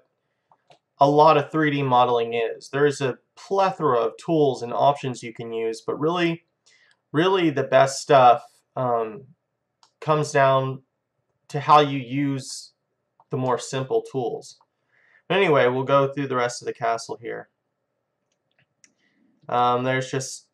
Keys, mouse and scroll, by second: 4.3-5.5 middle drag, 9.3-10.8 middle drag, 11.1-12.6 middle drag, 12.8-15.5 middle drag, 18.4 click, 19.7-20.5 middle drag.